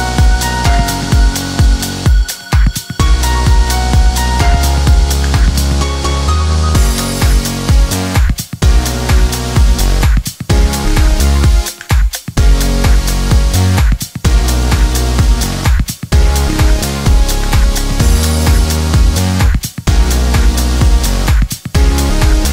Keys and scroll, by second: 3.3 5, 3.5 Return, 15.5 Delete, 17.0 Delete, 21.0 Escape.